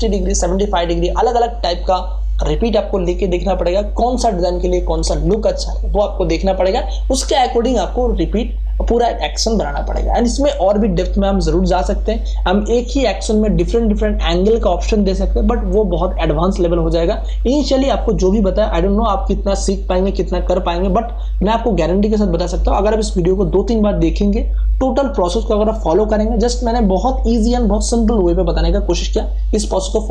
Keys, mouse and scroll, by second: 10.3 click, 17.2 click, 24.1 scroll down 1.